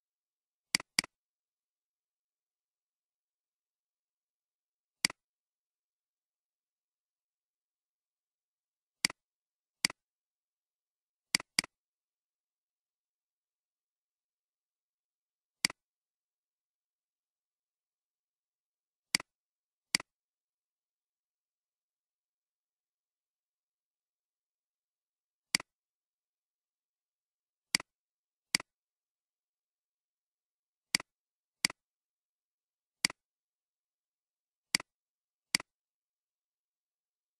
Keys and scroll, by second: 2.4-3.2 typing, 3.2 Return, 13.3-13.9 typing, 15.4-16.2 typing.